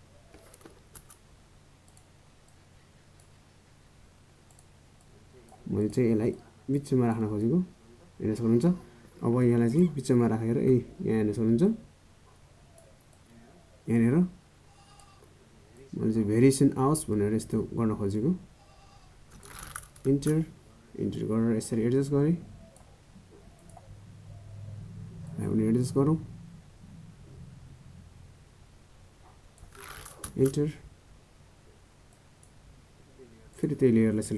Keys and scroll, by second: 34.2 ctrl+j.